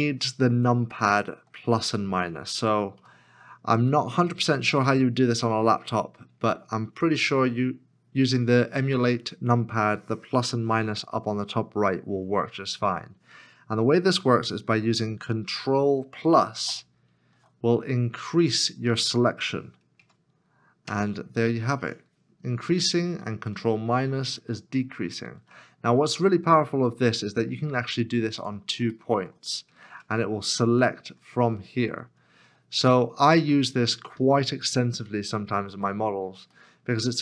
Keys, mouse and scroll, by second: 0.0 middle click, 0.9 middle click, 1.8 shift+middle click, 3.0 KP_Decimal, 3.6-4.2 scroll down 1, 4.3-5.1 scroll down 1, 5.1 middle click, 6.0 scroll down 1, 6.8 shift+middle click, 16.7 ctrl+=, 20.0 ctrl+KP_Add, 20.8 ctrl+KP_Add, 22.3 ctrl+KP_Subtract, 24.8 ctrl+-, 26.9 middle click, 28.4 shift+click, 29.2 middle click, 29.9 ctrl+KP_Add, 30.6 ctrl+KP_Subtract, 31.0 ctrl+KP_Add, 31.4 ctrl+KP_Subtract, 31.7 ctrl+KP_Add, 32.0 ctrl+KP_Subtract, 33.6 middle click, 34.4 shift+middle click, 36.5 middle click.